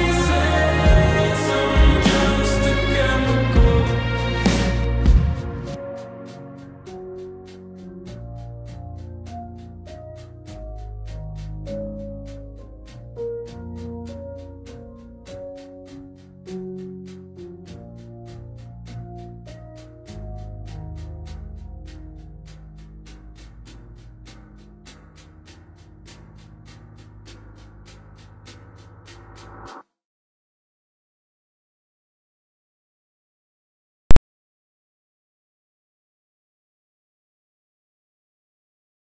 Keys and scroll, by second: 0.1 x, 29.4 x.